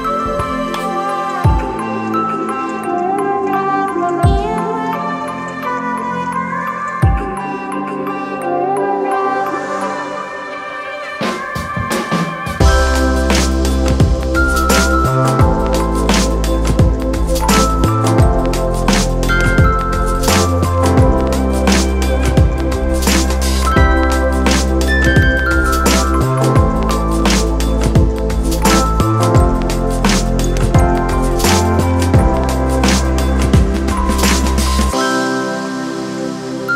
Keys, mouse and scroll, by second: 5.2 alt+shift+click, 19.1 ctrl+d, 21.9 click, 27.5 alt+shift+click, 31.4 alt+shift+click.